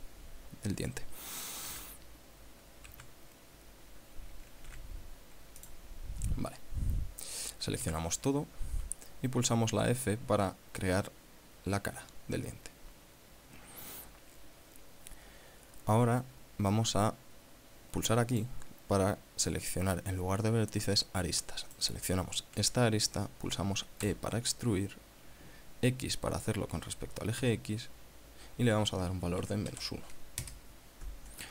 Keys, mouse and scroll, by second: 2.1 z, 3.3 Escape, 5.1 x, 6.0 click, 7.3 scroll up 1, 8.3 a, 12.3 f, 18.7 click, 22.1 right click, 24.5 e, 27.8 x, 29.8 KP_Subtract, 30.1 KP_1, 30.8 KP_Enter.